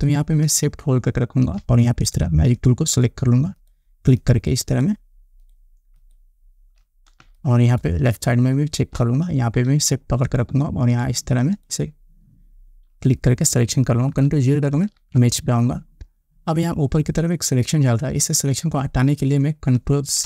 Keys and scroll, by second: 7.7 space, 15.2 ctrl+0.